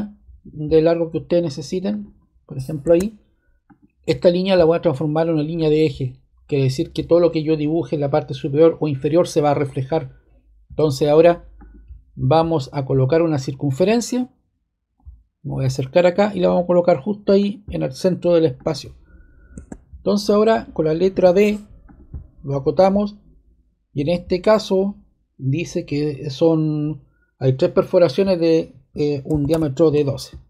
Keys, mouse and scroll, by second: 1.9 click, 2.8 scroll, 5.5 click, 6.4 click, 11.5 click, 17.3 click, 18.5 click, 19.5 ⟲, 21.1 d, 21.8-23.6 drag, 29.0-29.9 typing.